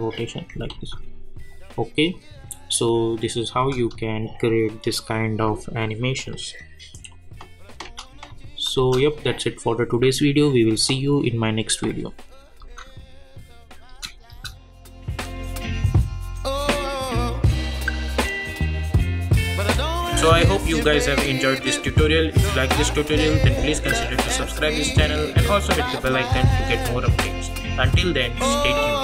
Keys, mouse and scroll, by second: 0.7 ctrl+z, 2.1 click, 3.6 space, 7.8 space, 8.3 click, 8.7 space, 12.6 space.